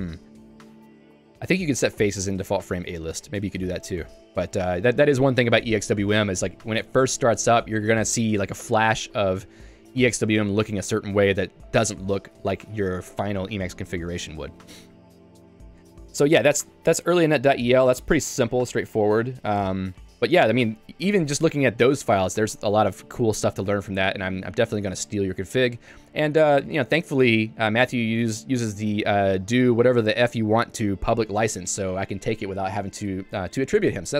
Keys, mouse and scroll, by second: 1.0 k, 3.0 l, 3.6 Escape, 11.2 Escape, 13.7 j, 16.4 k, 19.7 j, 21.1 super+e, 22.1 j, 22.4 Return, 23.8 ctrl+u, 25.7 k, 27.8 j, 29.8-31.0 l, 33.0 Escape.